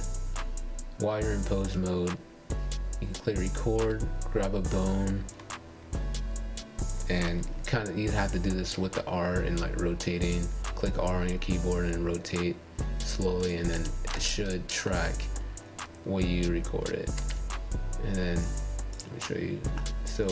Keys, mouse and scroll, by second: 2.3-3.0 scroll up 3, 3.1-6.0 shift+middle drag, 6.1 click, 6.7 scroll up 2, 7.3 shift+scroll up 1, 7.4-8.3 shift+middle drag, 8.3-8.7 scroll up 5, 8.7-11.1 shift+middle drag, 11.1 space, 11.9 r.